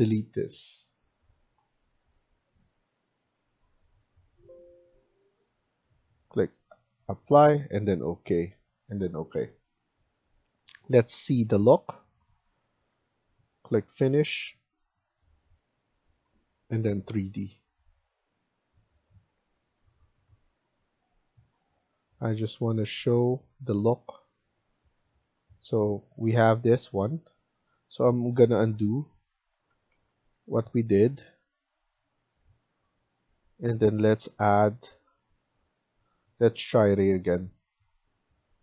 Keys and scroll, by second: 12.5 Escape, 12.8 Escape, 27.7 ctrl+z, 28.6 ctrl+z, 29.0 ctrl+z, 29.5 ctrl+z.